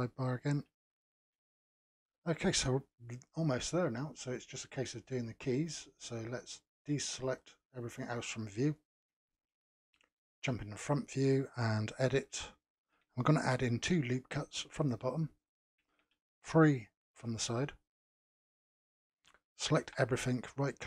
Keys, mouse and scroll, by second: 0.0-0.7 scroll down 3, 0.9-4.5 shift+middle drag, 4.5 click, 6.4 click, 7.2 click, 8.1-9.5 middle drag, 9.5 KP_Decimal, 10.2 KP_1, 11.0 scroll down 2, 12.1 Tab, 13.7 ctrl+r, 17.0 ctrl+r, 19.7 a, 20.5-20.8 right drag.